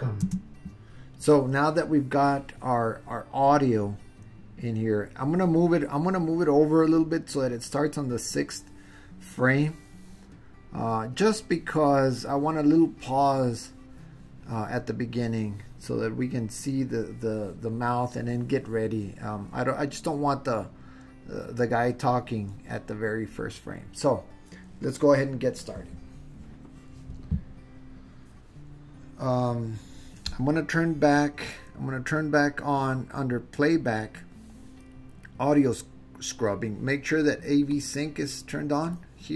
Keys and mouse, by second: 0.3 space, 3.8-5.1 drag, 9.6-11.4 drag, 33.9-39.3 drag.